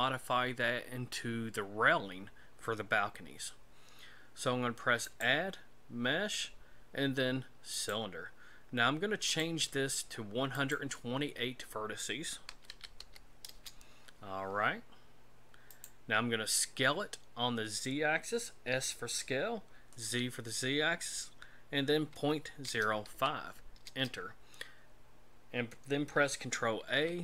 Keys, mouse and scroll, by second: 5.0 click, 9.3 click, 10.5 click, 15.7 click, 18.7 s, 26.8 ctrl+a.